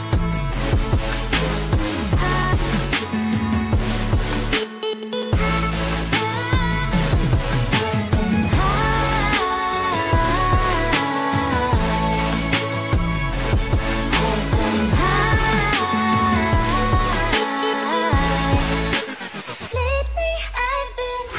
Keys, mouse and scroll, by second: 2.7 click, 2.7 shift+scroll up 1, 3.5-3.9 shift+scroll down 1, 3.9 shift+scroll up 1, 5.9 click.